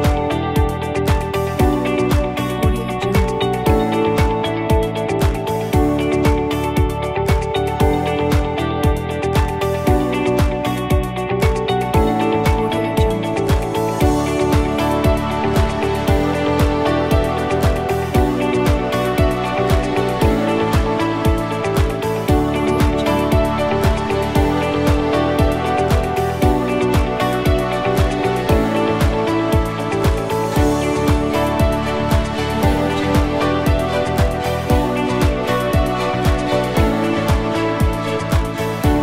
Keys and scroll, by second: 1.1 h.